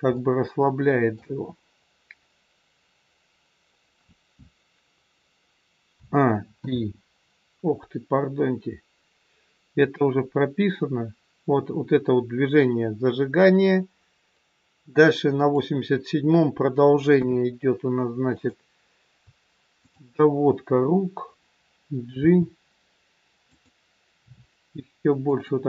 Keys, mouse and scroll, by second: 0.1 middle click, 3.7-5.9 scroll down 1, 5.9 a, 6.6 i, 9.8 click, 17.0 KP_3, 18.3 click, 19.8 shift+click, 22.1 g, 24.1 r.